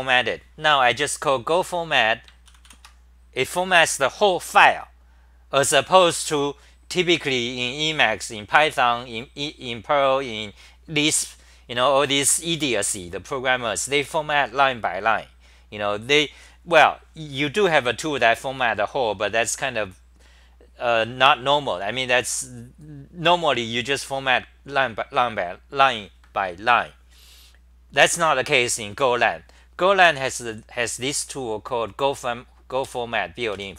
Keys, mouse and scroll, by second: 2.8 ctrl+c, 32.9 f, 33.5 Home.